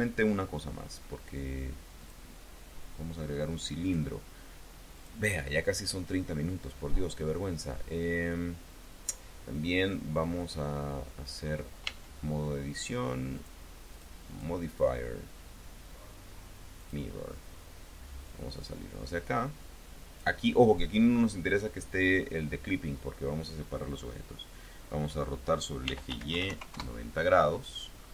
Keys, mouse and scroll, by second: 1.8 click, 3.6 click, 4.8 click, 11.6 Tab, 13.2 click, 13.8 click, 14.1 click, 16.6 click, 18.1-20.2 drag, 25.4-26.4 typing, 26.6 KP_Enter, 27.8-28.1 scroll up 1.